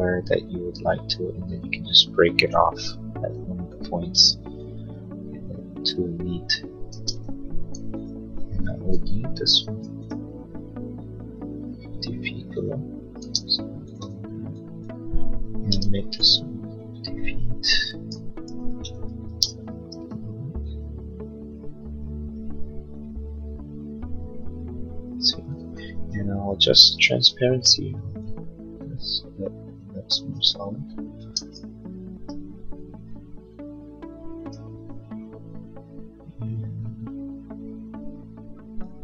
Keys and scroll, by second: 6.8 space, 9.1 m, 13.2 space, 13.9 space, 15.9 m, 18.0 5, 18.4 0, 18.7 Return, 19.2 space, 25.7 b.